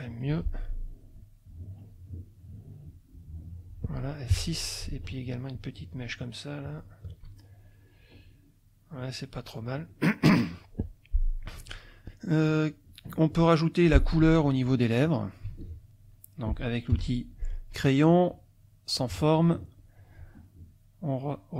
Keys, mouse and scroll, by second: 0.3 F2, 1.0 click, 1.8 click, 2.4 click, 3.2 click, 4.3 F6, 5.2 shift+click, 6.6 shift+click, 8.2-8.9 middle drag, 9.2 middle click, 9.9 middle click, 10.4 click, 10.8 middle click, 11.2 click, 11.7 F2, 12.4 click, 15.4 z, 15.6 click, 16.1 click, 16.9 F6, 17.9-19.2 drag, 20.5-21.5 drag.